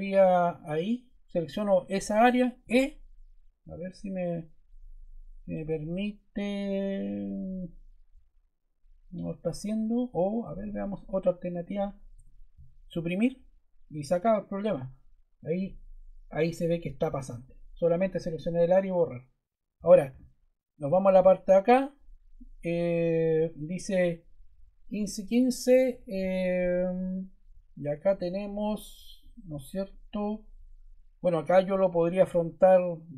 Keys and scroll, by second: 2.5 e, 12.0 BackSpace.